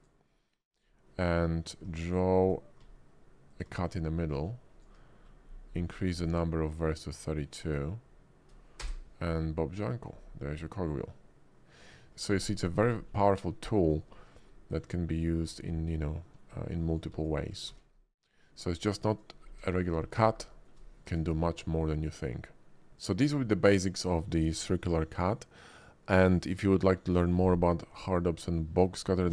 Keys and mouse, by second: 1.9 click, 2.4 click, 3.5 ctrl+click, 8.8 space, 9.5 click, 10.5-11.9 drag, 11.9 middle drag, 13.8 shift+middle drag, 14.4-15.2 drag, 15.9-16.3 drag, 16.3 middle click, 16.8 click, 17.5 shift+x, 17.6 shift+a, 19.7 shift+middle click, 20.5 shift+middle drag, 20.8 middle click, 21.0 d.